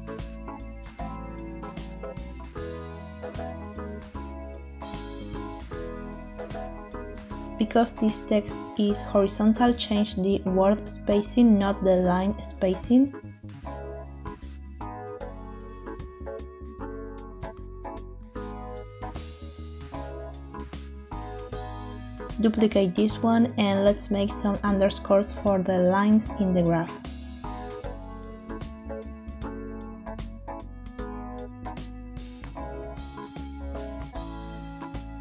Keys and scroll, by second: 0.0 2, 1.8-4.3 typing, 11.3 Tab, 22.9 shift+d, 23.5 shift+Escape, 25.7 Tab, 26.9 BackSpace, 28.1 BackSpace, 28.2 BackSpace, 28.3 BackSpace, 30.7 1, 30.8 Return, 32.6 shift+-, 34.5 -.